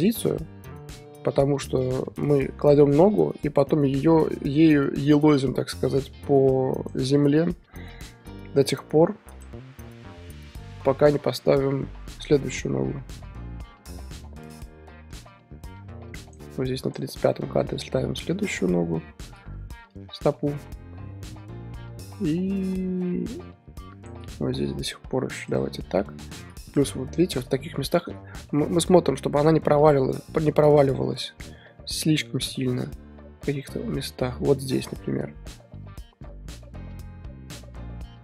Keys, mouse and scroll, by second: 1.8-7.0 drag, 7.4 r, 10.1 i, 11.5 typing, 11.6-16.5 drag, 17.2 r, 18.9 i, 19.9-24.2 drag, 24.7 r, 26.0 i, 26.8 Left, 28.3-28.6 shift+middle drag, 28.6-29.8 scroll up 4, 29.8-38.2 drag.